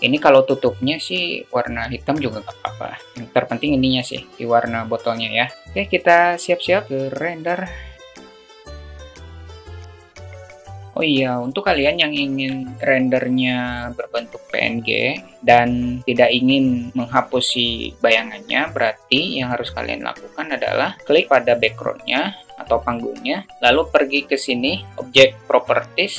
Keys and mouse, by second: 3.9 click, 7.6 click, 8.5 drag, 8.9 drag, 9.4 click, 10.2 click, 25.3 click.